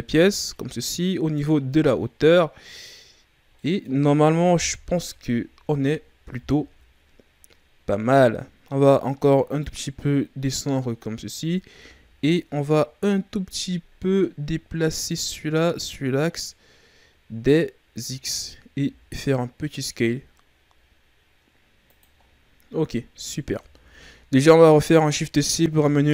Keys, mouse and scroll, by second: 0.1 z, 0.4-3.7 scroll down 7, 6.9-9.6 scroll up 5, 9.6 click, 11.7 a, 12.0 a, 15.1 click, 18.7 s, 22.2-23.6 scroll down 9, 23.6 Tab, 24.2-25.7 ctrl+scroll down 3, 25.7 shift+c.